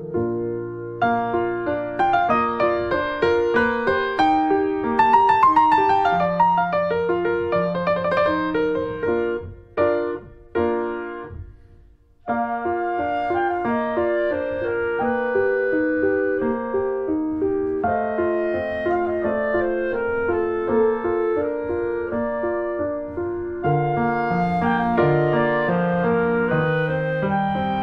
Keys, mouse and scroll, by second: 0.3 click, 0.5 middle click, 1.0 s, 2.1 alt+middle click, 2.6 r, 3.4 click, 4.0 click, 4.3 middle click, 4.8 click, 4.9 middle click, 5.2 click, 5.4 middle click, 5.6 s, 6.6 click, 6.9 shift+middle click, 7.7 click, 7.8 middle click, 8.3 click, 8.8 middle click, 9.2 r, 10.3 click, 10.4 middle click, 10.8 middle click, 11.0 ctrl+s, 11.1 click, 11.4 middle click, 12.0 click, 12.4 shift+middle click, 13.1 ctrl+s, 13.2 click, 13.7 alt+middle click, 14.1 click, 14.4 middle click, 15.0 s, 15.5 middle click, 15.6 click, 16.5 alt+middle click, 16.6 alt+middle click, 16.9 ctrl+s, 17.0 click, 17.5 alt+middle click, 17.8 click, 18.4 middle click, 18.9 ctrl+s, 19.1 shift+middle click, 19.5 click, 20.7-21.8 drag, 21.8 middle click, 21.9 click, 22.1 middle click, 22.3 scroll up 1, 22.4-23.7 shift+middle drag, 23.7 ctrl+s, 23.9 shift+middle click, 24.4 click, 24.5 ctrl+1, 25.0 ctrl+2, 25.1 click, 25.3 middle click, 25.7 scroll down 1, 25.8 middle click, 26.0 click, 26.1 middle click, 26.5 ctrl+space, 26.7-27.8 shift+middle drag.